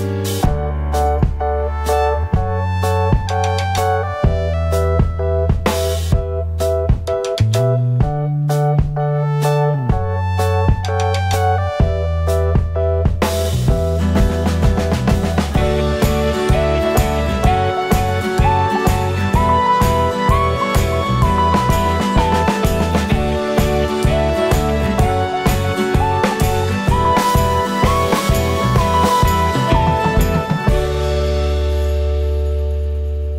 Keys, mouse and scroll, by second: 0.1 shift+click, 1.0-2.7 scroll down 2, 2.7-4.2 scroll down 1, 4.2-4.5 scroll down 1, 4.5 alt+d, 5.9 click, 6.8-7.2 scroll down 1, 7.8 z, 8.6 click, 8.9-9.4 scroll down 1, 9.8 alt+a, 10.2-10.6 scroll up 1, 10.6 click, 11.4 alt+d, 14.2 g, 15.3 alt+a, 15.3 click, 16.6 alt+d, 19.1-20.4 drag, 19.2 scroll up 1, 19.8 alt+d, 22.7 alt+d, 23.9 scroll down 1, 25.1 s, 25.3-29.8 drag, 26.3 alt+d, 30.8-33.3 drag, 30.8-31.1 scroll up 1, 31.1 scroll down 1, 32.6 alt+d.